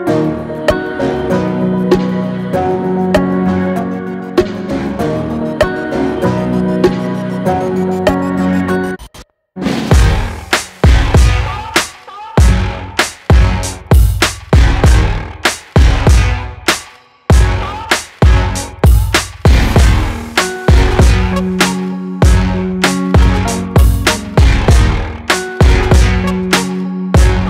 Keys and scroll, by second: 2.4 ctrl+t, 10.7 ctrl+t, 25.0 ctrl+t.